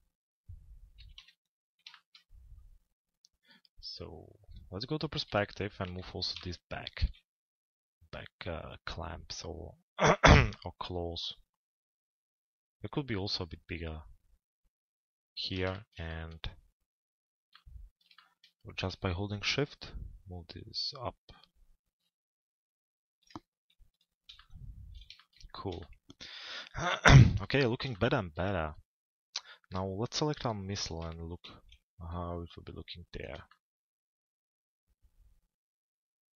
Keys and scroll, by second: 0.5 t, 1.2 z, 5.9 z.